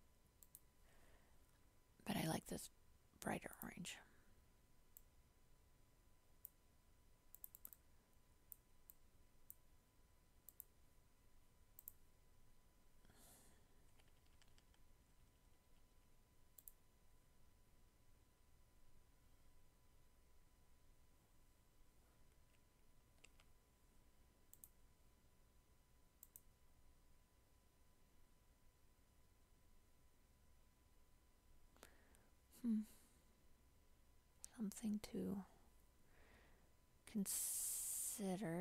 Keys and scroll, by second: 23.3 ctrl+j.